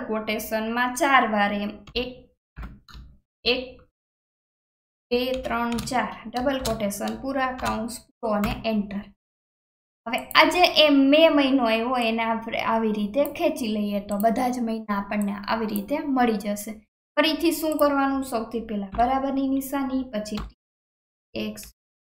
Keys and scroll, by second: 2.9-5.0 typing, 6.6 shift+', 7.6 shift+0, 8.4 Return.